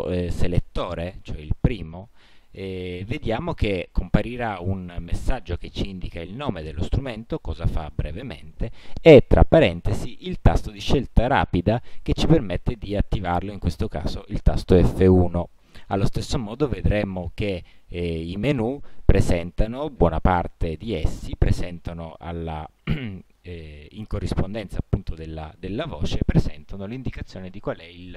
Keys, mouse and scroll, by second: 16.4 click.